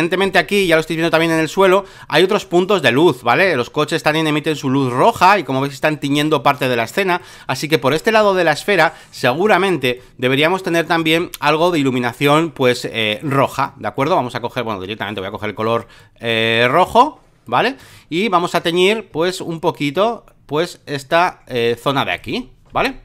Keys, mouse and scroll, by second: 0.2 alt+middle click, 0.5 space, 0.6 click, 1.3 alt+middle click, 3.0 click, 3.5 space, 4.0 click, 6.2 click, 7.2 click, 9.4 ctrl+click, 9.8-11.6 drag, 13.2 alt+click, 13.6 alt+click, 15.0-22.7 drag, 22.8 alt+middle click.